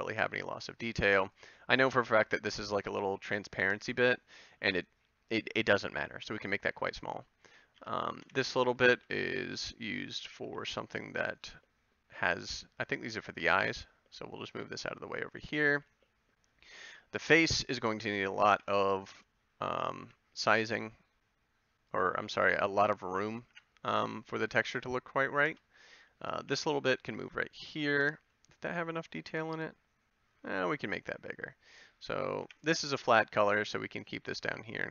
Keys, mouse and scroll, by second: 0.1 s, 0.9 g, 2.1 g, 2.9 a, 7.7 c, 8.9 ctrl+l, 10.4 g, 12.3 g, 14.8 g, 15.7 a, 18.5 b, 20.0 g, 22.2 a, 23.5 b, 24.7 Tab, 25.5 Tab, 26.4 g, 27.6 a, 28.0 Tab, 30.6 Tab, 32.4 b, 33.3 g, 34.7 a.